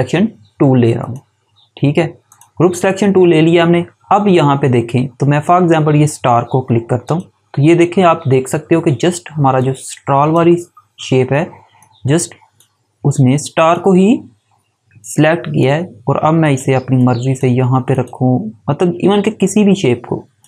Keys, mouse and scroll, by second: 7.0 click, 9.5 click, 20.3 click.